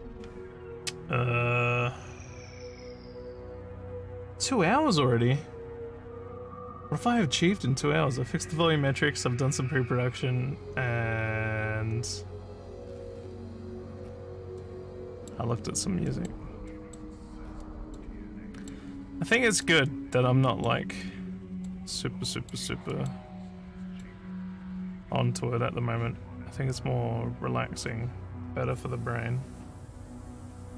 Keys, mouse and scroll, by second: 3.5 scroll up 1, 14.6 middle click, 16.1 middle click, 16.7 middle click, 17.6 middle click, 18.4 middle click, 19.3 middle click, 19.9 middle click, 20.4 middle click, 21.0 middle click, 21.9 middle click, 22.9 middle click, 23.6 middle click, 28.8 middle click.